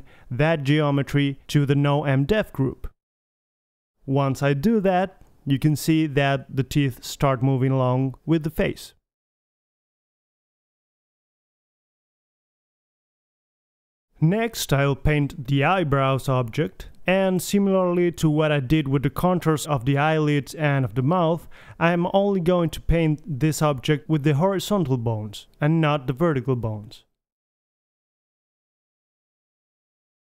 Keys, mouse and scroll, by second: 1.4-3.8 middle drag, 4.5 Tab, 4.8 z, 5.0-5.5 middle drag, 5.5 click, 5.7-6.3 right drag, 5.8-6.3 drag, 5.9 g, 7.1 middle click, 7.3 r, 7.8 drag, 8.1 g, 8.6-9.2 drag, 8.6 right click, 8.8 g, 9.8 g, 10.0 g, 11.1 a, 11.3 alt+g, 11.4 alt+r, 11.5 alt+s, 11.5 a, 11.7 KP_3, 12.8 KP_1, 15.3-16.3 drag, 16.5-17.5 drag, 19.2-22.1 drag, 22.3 click, 22.6 middle drag, 25.7-26.3 middle drag, 28.2-29.7 middle drag, 29.9-30.2 drag.